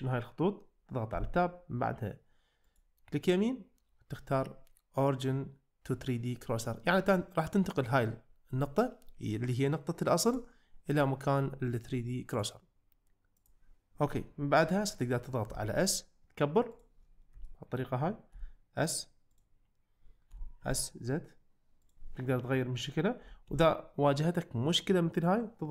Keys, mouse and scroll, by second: 1.3 Tab, 2.7-6.4 right drag, 10.3 right click, 12.4-13.5 right drag, 15.5 s, 17.5 shift+middle drag, 18.4 s, 20.6 z, 23.2 s, 23.5 z.